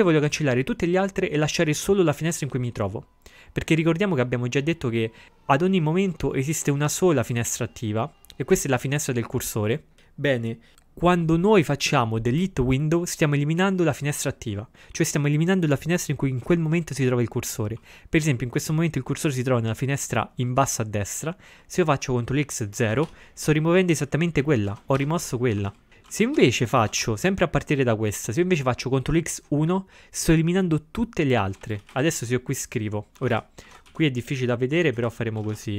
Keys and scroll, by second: 22.8 ctrl+x, 23.1 0, 24.7 ctrl+x, 25.0-26.4 typing, 31.7 ctrl+a, 31.8 ctrl+space, 31.9 ctrl+e, 31.9 ctrl+w, 33.2 ctrl+x, 33.4 o, 33.7 ctrl+x, 34.0 b, 35.5 ctrl+x, 35.5-35.7 typing.